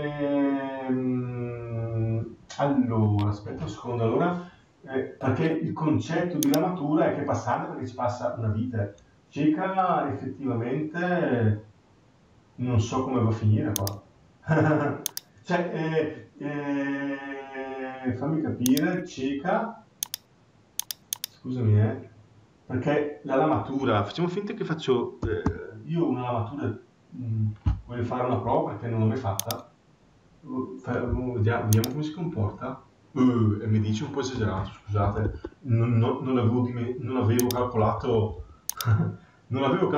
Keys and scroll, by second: 34.8 Escape.